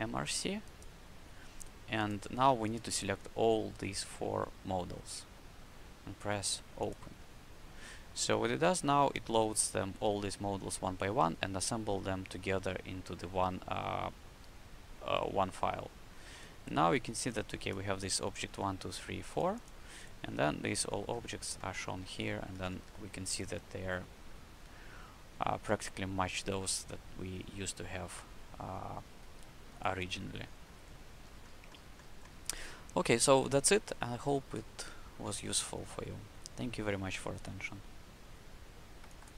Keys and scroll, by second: 22.5 w, 29.1 q.